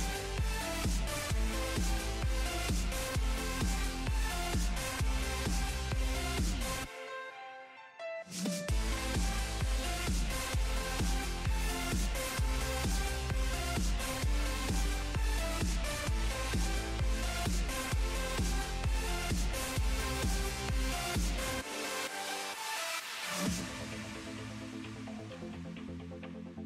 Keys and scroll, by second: 15.1 z, 15.6 z.